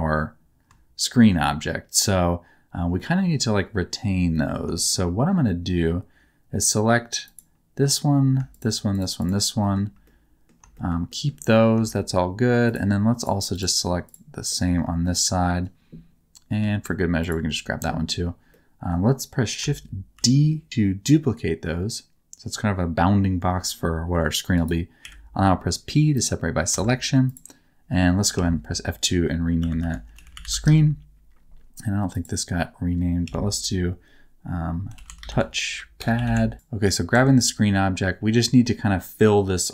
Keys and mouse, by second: 1.0 shift+middle click, 2.9 middle click, 4.3 middle click, 4.7 shift+middle click, 8.4 shift+click, 8.9 shift+click, 9.5 shift+middle click, 10.0 middle click, 10.7 shift+middle click, 11.0 shift+middle click, 13.1 shift+click, 14.4 shift+middle click, 15.0 middle click, 17.1 shift+click, 18.4 middle click, 20.1 shift+d, 24.6 click, 25.0 p, 26.7 Tab, 27.3 click, 28.3 F2, 30.3 e, 33.2 F2, 37.1 Tab.